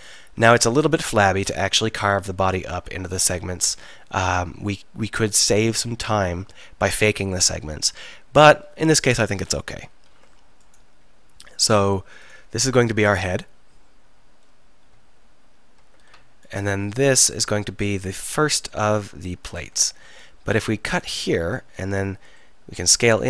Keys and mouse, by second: 0.8 click, 3.3 KP_1, 3.7 KP_3, 10.1 ctrl+r, 19.4 middle click, 20.0 ctrl+r, 21.2-23.0 drag, 23.0 s.